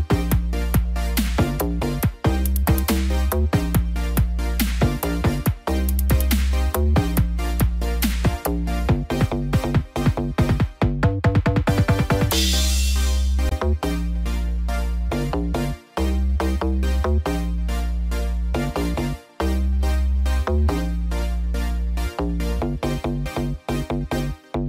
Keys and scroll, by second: 13.4 ctrl+=, 23.5 ctrl+=.